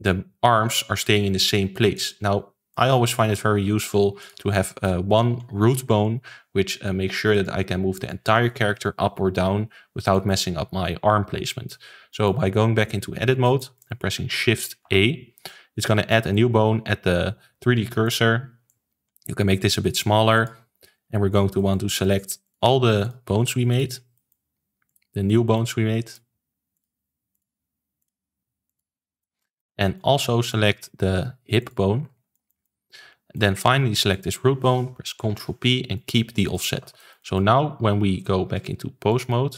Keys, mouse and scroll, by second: 2.7-3.4 middle drag, 3.4 alt+r, 3.7 alt+g, 4.1 click, 4.4 ctrl+s, 4.6-7.3 shift+middle drag, 7.3-10.1 drag, 10.1-14.8 shift+middle drag, 14.8 shift+a, 15.4-18.6 middle drag, 18.6 click, 20.3 click, 20.6 ctrl+s, 20.8-22.4 middle drag, 22.4 click, 23.0 shift+click, 23.6 shift+click, 24.1 shift+middle click, 24.8 shift+click, 25.2-26.7 middle drag, 26.7 shift+click, 27.3 shift+click, 27.9 shift+click, 28.6 shift+click, 29.1 middle click, 30.1-30.4 scroll up 2, 30.4-31.5 middle drag, 31.5 shift+click, 32.0-32.3 scroll down 2, 32.3-34.1 shift+middle drag, 34.1 shift+click, 35.1 ctrl+p, 36.4 click, 36.7 ctrl+s, 36.9-38.5 shift+middle drag, 38.5-39.5 drag.